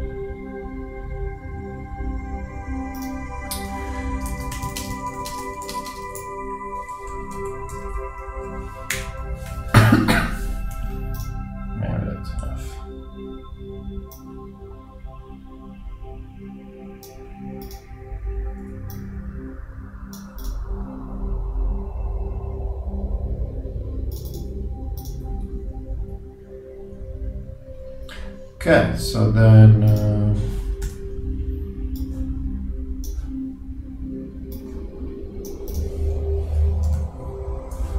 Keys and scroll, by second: 4.0 shift+Return, 4.4-5.2 typing, 7.3 shift+Up, 7.4 shift+Right, 7.9 shift+Down, 9.0 shift+BackSpace, 30.9 super+d.